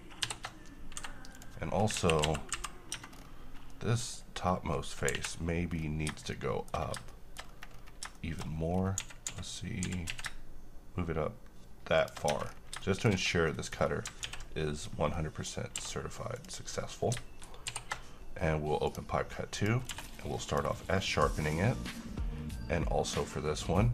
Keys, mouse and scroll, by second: 0.4 ctrl+shift+o, 1.1 Escape, 1.5 click, 3.1 Tab, 3.3-3.9 scroll up 1, 3.9 middle click, 4.4-5.3 scroll down 1, 5.9-6.2 scroll up 1, 6.2 scroll down 1, 6.5-7.1 middle click, 6.9 shift+scroll up 1, 7.3 middle click, 7.6 scroll up 1, 8.3 middle click, 8.6 scroll up 1, 9.1-10.2 typing, 12.1 shift+click, 12.5 shift+Tab, 12.6 scroll down 1, 12.9 middle click, 13.3-13.6 scroll down 1, 13.6 middle click, 14.0 scroll down 1, 14.4 s, 15.0 scroll down 1, 15.3-15.9 middle click, 15.9 q, 16.5 click, 17.8 ctrl+shift+o, 19.0 click, 20.0 q, 20.6 click, 21.2-23.9 middle drag.